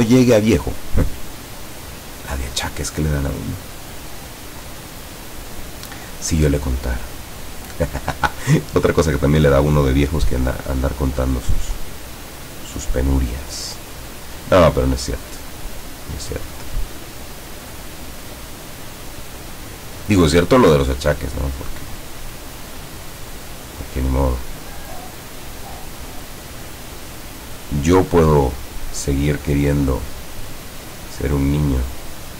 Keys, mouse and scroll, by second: 0.8 click, 4.0 click, 6.8 click, 9.9 click, 16.0 scroll up 1, 17.5 click, 20.4 click, 22.9 scroll down 1, 24.5 click, 30.0 click.